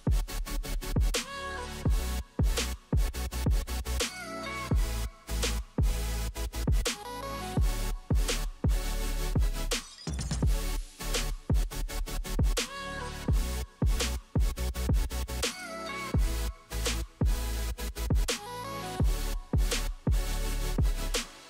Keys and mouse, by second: 17.7 KP_1, 19.7 middle click, 19.7 right click.